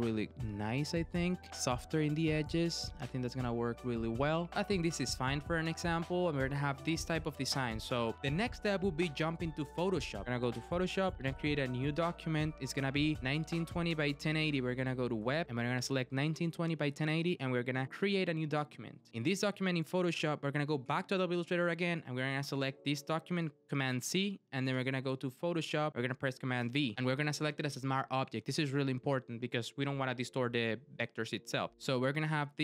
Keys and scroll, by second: 23.9 super+c, 24.7 super+Tab, 26.6 super+v.